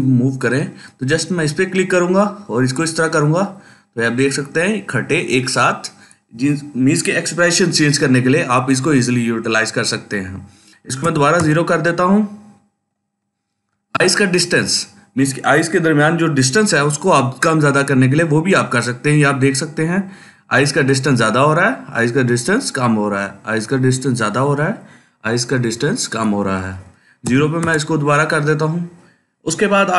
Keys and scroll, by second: 2.7 typing, 10.9 0, 11.2 Return, 15.1 typing, 27.1 0, 27.4 Return.